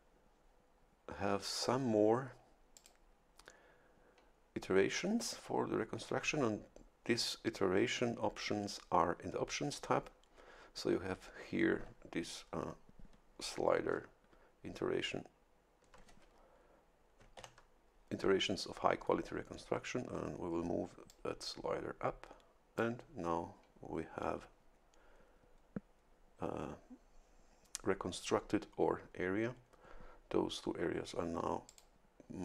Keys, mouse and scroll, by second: 2.7 click, 17.4 shift+F11, 21.1-23.3 drag, 31.6 click.